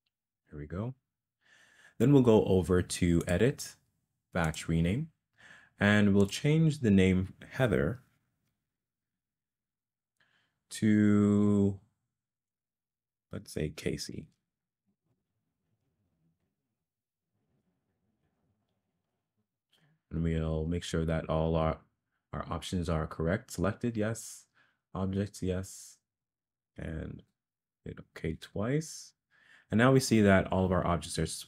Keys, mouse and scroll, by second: 3.3-29.7 drag.